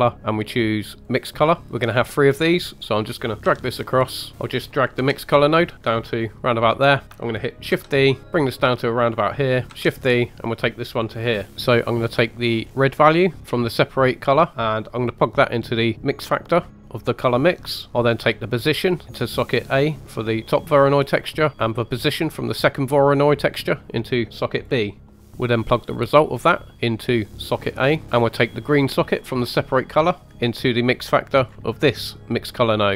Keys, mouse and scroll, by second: 1.6 click, 1.6 middle click, 2.3 click, 3.4 g, 3.9 click, 4.3 ctrl+z, 4.9 g, 6.9 click, 8.5 shift+d, 9.0 click, 9.7 shift+d, 10.8 click, 11.5 middle click, 11.5 scroll down 2, 12.2 middle click, 12.6 scroll up 1, 13.4 drag, 16.7-17.9 middle drag, 18.3 drag, 21.5 right click, 21.7-22.0 drag, 25.0-26.4 middle drag, 26.4 click, 28.6-28.9 drag, 31.7 middle click.